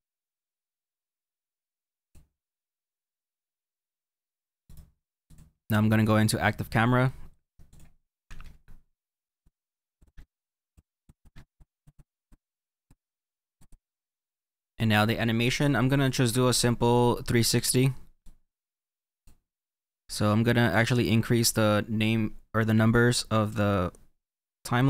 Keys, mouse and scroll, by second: 3.5 middle click, 5.3 right click, 8.4 click, 9.4 click, 10.2 click, 10.4 click, 10.9 click, 11.3 click, 11.6 click, 12.3 click, 12.4 click, 13.7 click, 18.3-19.7 drag, 20.3-24.8 drag.